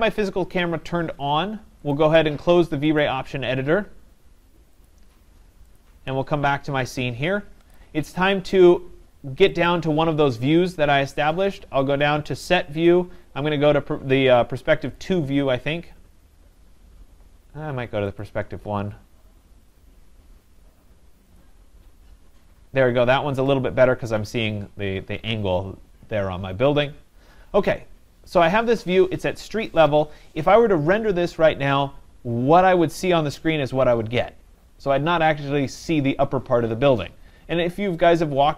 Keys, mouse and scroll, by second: 2.0 click, 4.5 click, 4.9 click, 5.9 click, 7.8 click, 9.7 click, 15.0 click, 18.2 click, 21.4 click.